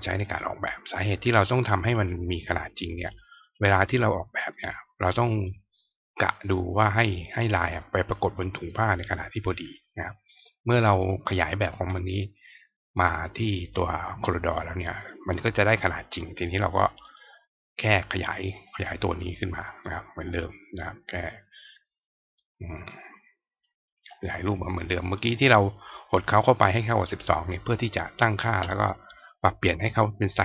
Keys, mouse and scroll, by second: 0.2 click, 0.2 right click, 2.0-3.0 drag, 4.5 click, 5.0 click, 5.4 click, 6.3-7.3 drag, 10.2 click, 10.9 click, 12.9 click, 16.3 click, 17.0 click, 18.4 click, 19.8 click, 21.9-22.3 drag, 23.5-24.0 drag, 25.2 click.